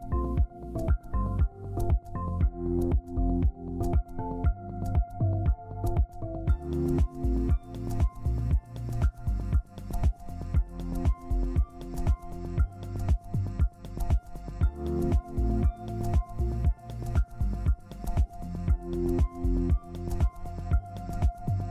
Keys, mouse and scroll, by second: 2.3 typing, 2.7 ctrl+space, 6.4 scroll up 1, 7.2 ctrl+click, 8.3 ctrl+space, 8.3 click, 9.1 Up, 9.3 Up, 10.5 right click, 11.1 scroll down 1, 11.9 typing, 12.6 ctrl+space, 13.4 scroll up 1, 15.1 scroll down 1, 15.3 scroll down 1, 15.9 scroll down 1, 17.6 right click, 18.0 scroll up 1, 18.6 scroll down 1, 20.6 double click.